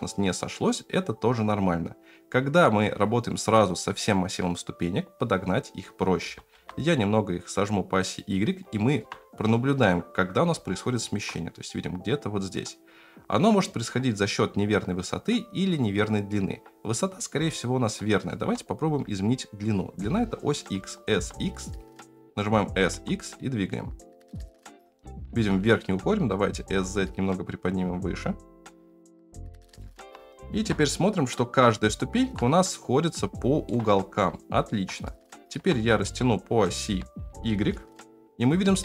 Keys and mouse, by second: 6.2 s, 8.7 middle drag, 10.7-11.0 shift+middle drag, 17.5-18.2 shift+middle drag, 18.8 s, 20.8 s, 22.6 s, 26.2 s, 29.4 s, 29.8 shift+middle drag, 31.8-32.2 shift+middle drag, 33.3-33.6 shift+middle drag, 34.3-34.6 shift+middle drag, 35.2 shift+middle drag, 35.8 s.